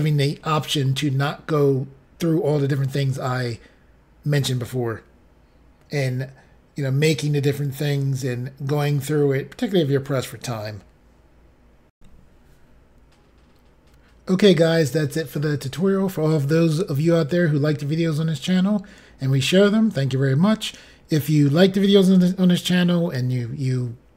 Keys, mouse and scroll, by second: 11.9 Insert.